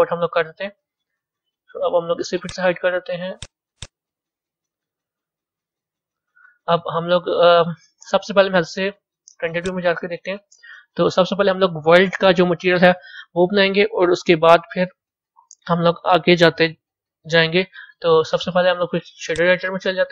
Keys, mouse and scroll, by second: 0.2-2.3 middle drag, 2.3 click, 3.2 click, 3.6 click, 4.4-5.6 scroll up 5, 5.6-8.9 middle drag, 8.9 z, 9.6 click, 10.3-13.3 middle drag, 19.2-20.1 drag.